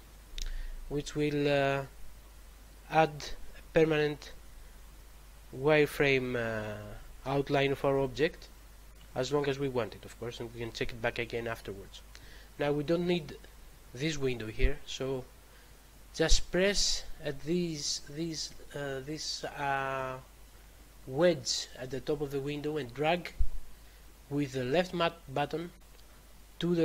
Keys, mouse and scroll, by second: 22.7 click.